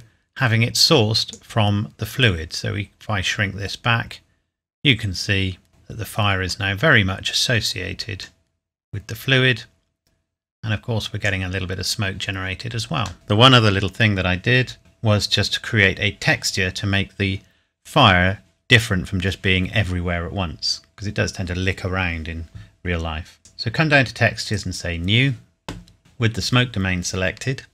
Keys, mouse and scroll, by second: 5.7 middle click, 6.7 scroll up 1, 7.7 click, 19.0 middle click, 23.4 click.